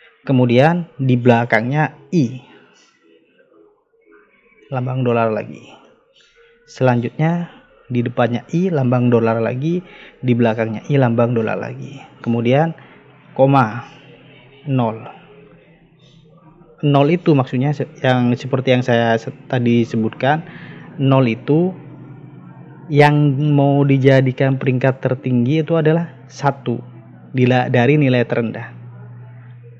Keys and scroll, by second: 3.8 Right, 5.5 shift+4, 7.4 Right, 9.3 shift+4, 10.1 Right, 11.4 shift+4, 12.1 Right, 13.6 ,, 14.9 0.